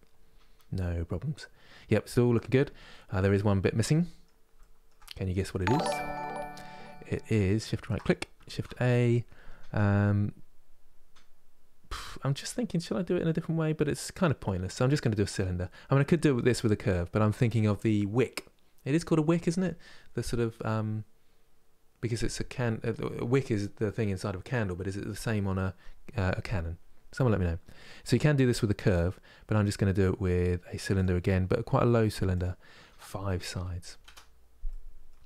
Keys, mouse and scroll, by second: 2.5 scroll up 1, 2.9-4.8 middle drag, 4.8-5.3 scroll up 1, 5.3-7.3 shift+middle drag, 7.3 shift+right click, 8.2 shift+a, 32.0-34.4 drag, 34.4-35.2 middle drag.